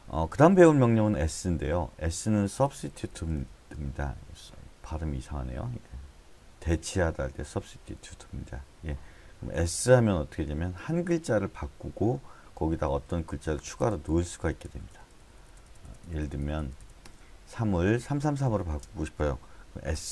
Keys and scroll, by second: 2.7-3.4 typing, 9.6 s, 12.9-14.6 typing, 17.0 Escape, 17.3-18.0 h, 18.4 h, 19.9 s.